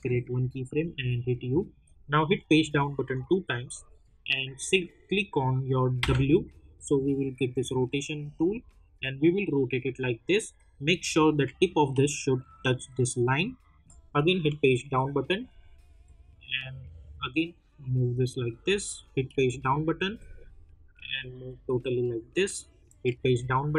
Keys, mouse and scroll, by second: 0.9 u, 2.5 Page_Down, 5.9 w, 8.9-10.8 drag, 10.8-11.5 alt+scroll up 1, 12.5-14.4 drag, 14.4 Page_Down, 15.5-16.2 scroll down 1, 16.5-19.3 drag, 19.3 Page_Down, 20.2-23.0 drag, 23.0 Page_Down.